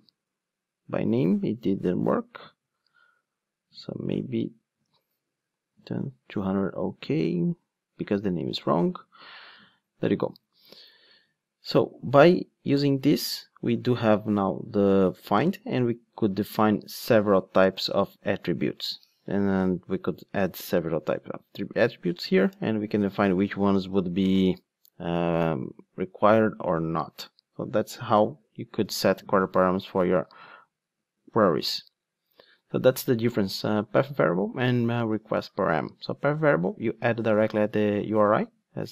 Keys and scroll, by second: 22.2 super+c, 23.4 super+v, 28.9 super+z, 29.5 super+z, 30.1 super+z, 31.3 super+z.